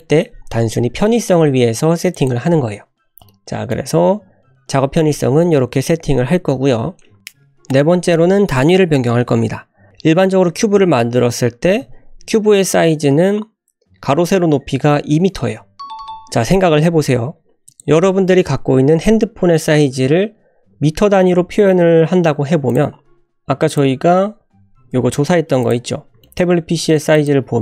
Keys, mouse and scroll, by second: 2.1 click, 2.7 scroll down 1, 3.3 middle click, 5.0 typing, 7.7 click, 8.4 click, 11.8 n, 17.7 click, 22.7 drag, 23.7 click, 23.7 scroll down 1, 24.9 shift+d, 25.9 scroll up 1, 26.2 shift+middle click, 26.6 s, 27.3 g.